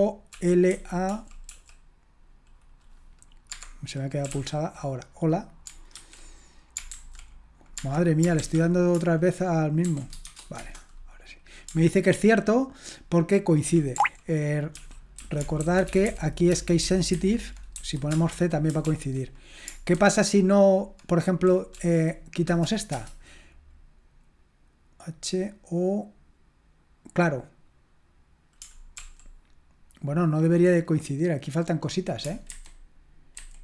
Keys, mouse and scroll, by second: 0.3 Right, 1.1 Right, 1.5 Right, 4.0-4.8 typing, 9.9-10.3 typing, 10.6 Return, 14.0 ctrl+o, 14.7 ctrl+p, 15.2 ctrl+a, 15.6 alt+f, 15.9 alt+f, 16.1 alt+f, 16.8 alt+b, 17.2 alt+b, 17.2-18.8 typing, 18.9 ctrl+p, 20.0 alt+b, 21.8 Right, 22.5 Delete, 22.9 Return, 29.0 ctrl+p, 32.5 alt+b, 33.4 alt+b.